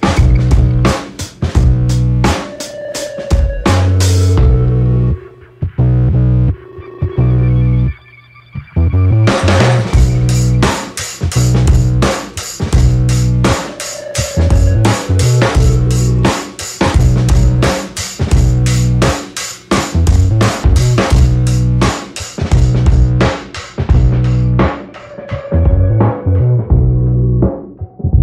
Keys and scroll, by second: 22.4 ctrl+z.